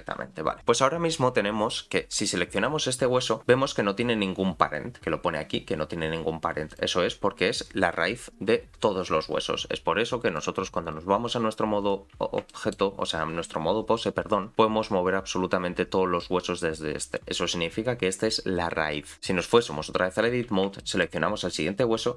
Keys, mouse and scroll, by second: 1.1-1.6 scroll down 1, 2.2 click, 6.7 click, 10.3 click, 11.8 click, 12.1-12.5 scroll down 3, 12.5 shift+middle click, 14.5 r, 19.1 click, 20.2-20.8 scroll up 5, 20.8 shift+middle click.